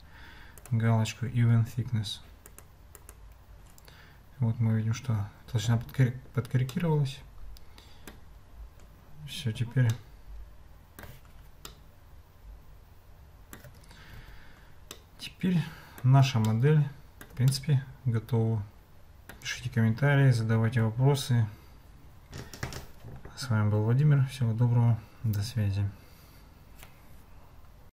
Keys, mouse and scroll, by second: 0.6 click, 2.5 click, 3.0 click, 6.7-8.1 middle drag, 10.0-11.0 shift+middle drag, 11.7-13.6 ctrl+middle drag, 14.9-16.1 middle drag, 16.5-17.3 shift+middle drag, 17.5-19.4 middle drag.